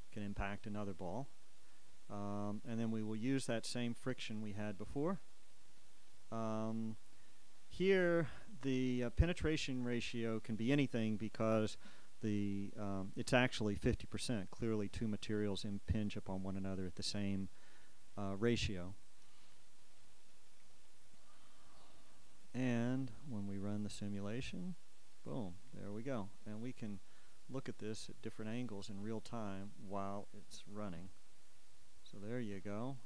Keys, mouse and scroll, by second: 11.5-16.9 shift+scroll up 2, 19.6 click, 21.5-24.4 drag, 27.1-28.8 drag, 28.8-30.2 scroll down 1, 30.2-31.0 shift+scroll down 1, 31.0-33.0 shift+drag, 32.7 shift+z.